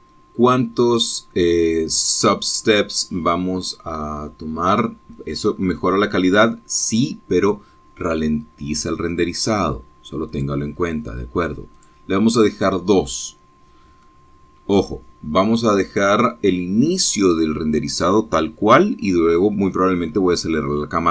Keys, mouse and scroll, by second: 0.0-0.6 scroll down 2, 11.5 click, 13.0 right click.